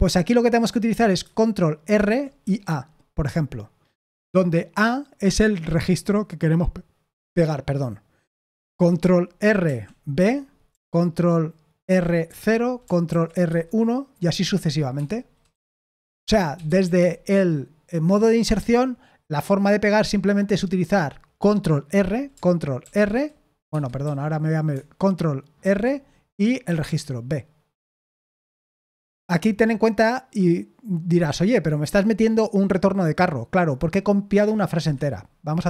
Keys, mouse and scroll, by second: 1.9 ctrl+r, 2.4 a, 9.6 ctrl+r, 10.1 b, 11.8 ctrl+r, 12.2 0, 13.0 ctrl+r, 13.4 1, 14.9 Escape, 15.5-17.2 typing, 22.8 ctrl+r, 23.6 Escape, 24.0 i, 25.6 ctrl+r, 26.6 a, 34.7 Escape.